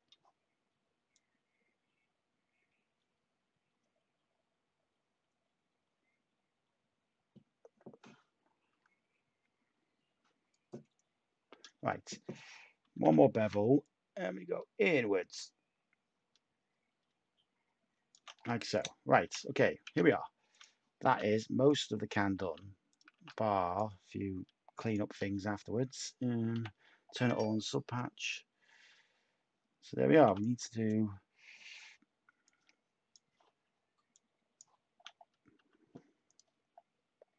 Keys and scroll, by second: 12.9 typing, 18.7 /, 19.8 Tab, 21.0 a, 22.3-23.1 typing, 25.0 Tab, 26.5 /, 35.5 Tab.